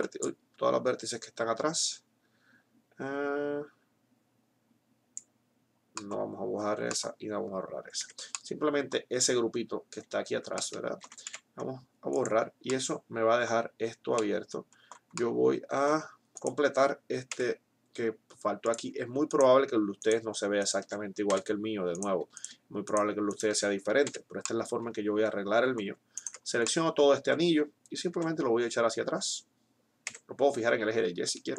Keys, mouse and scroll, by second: 8.2 middle click, 11.2 x, 15.1 middle click, 15.9-18.2 right drag, 17.2 e, 19.2-20.6 drag, 21.2 f, 24.1 f, 28.2 e.